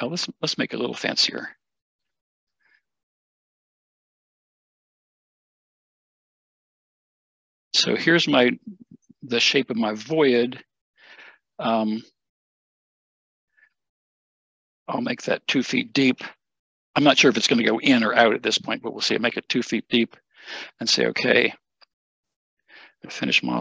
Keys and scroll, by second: 5.8 Escape, 5.9 Escape, 6.9 BackSpace, 15.7 2, 19.8 typing.